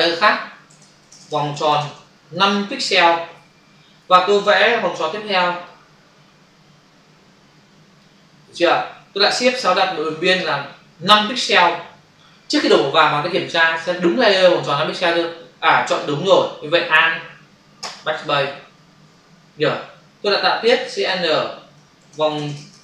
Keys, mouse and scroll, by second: 0.6 v, 1.8-2.2 typing, 3.1 Return, 4.9 m, 5.5 shift+click, 9.9 shift+F6, 11.0 5, 11.4 Return, 17.7 alt+BackSpace, 19.0 ctrl+d, 20.8 ctrl+shift+n, 21.9-22.8 typing.